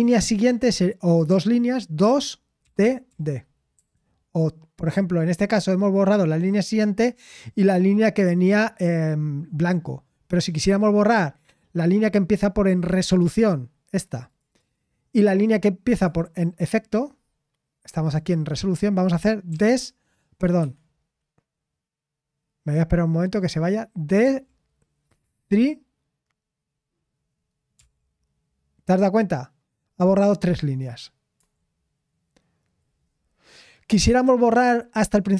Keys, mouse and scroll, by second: 6.1 typing.